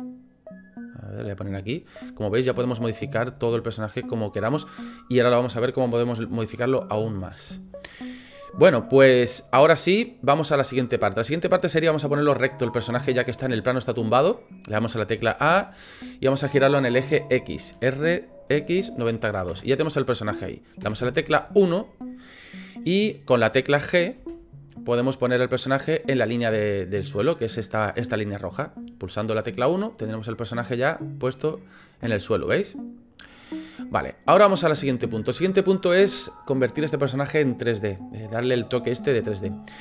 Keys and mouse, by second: 3.2 g, 6.1-6.5 drag, 6.5-7.2 middle drag, 13.4-14.8 middle drag, 15.2 a, 17.7 r, 22.9 KP_1, 24.1 g, 29.7-33.4 middle drag, 34.9-35.2 shift+middle drag, 35.4 middle click.